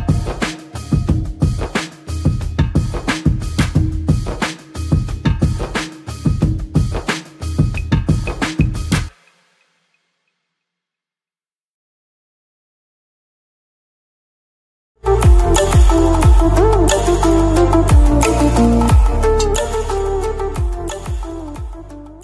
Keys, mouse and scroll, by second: 0.0 ctrl+-, 1.0 Tab, 2.0 m, 2.7 Tab, 3.4 f, 3.7 f, 5.9 ctrl+=, 7.3 click.